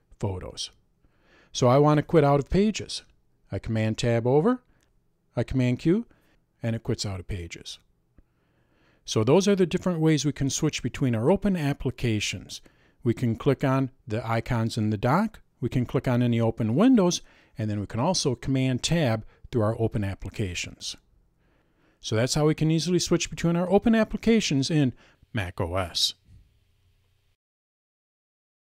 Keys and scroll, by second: 3.4 super+Tab, 6.5 super+q.